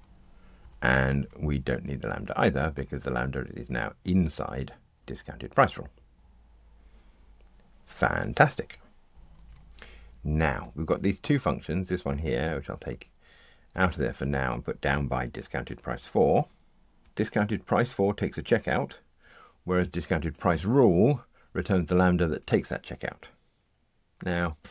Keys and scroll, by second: 1.8 alt+shift+Left, 2.7 Delete, 6.1 ctrl+r, 12.7 super+x, 13.7 Delete.